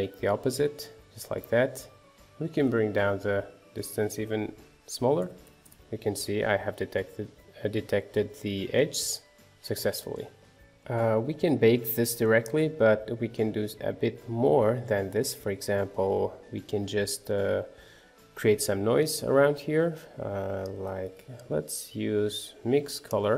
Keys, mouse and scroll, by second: 0.0 click, 1.0 middle click, 2.0 scroll down 2, 2.2-5.3 middle drag, 5.3 click, 5.7-8.5 middle drag, 8.5 scroll down 1, 8.7-10.5 middle drag, 10.5 scroll down 1, 10.6-13.2 shift+middle drag, 13.2-13.8 scroll up 2, 13.8-14.8 shift+middle drag, 14.8 scroll down 2, 15.1 shift+middle click, 15.8-16.7 scroll up 1, 16.7-17.8 scroll up 1, 17.8-18.3 scroll up 1, 18.3 scroll up 1, 22.4 shift+a, 23.2 scroll up 4.